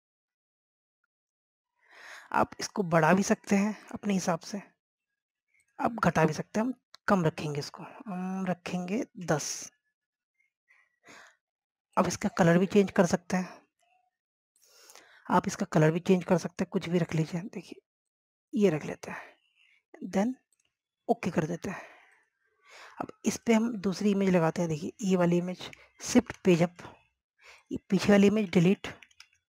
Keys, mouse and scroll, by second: 10.4 KP_1, 10.6 Tab, 13.1 click, 23.0 scroll down 1, 23.3 click, 23.7 scroll down 1, 24.1 scroll up 1, 24.6 click, 26.2 scroll up 1, 27.8 shift+Page_Up.